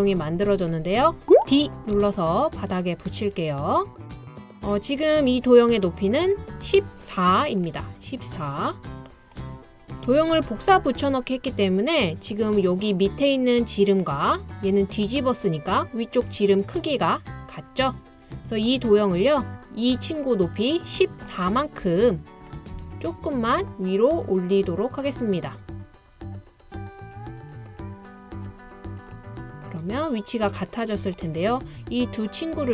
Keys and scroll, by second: 2.0 d.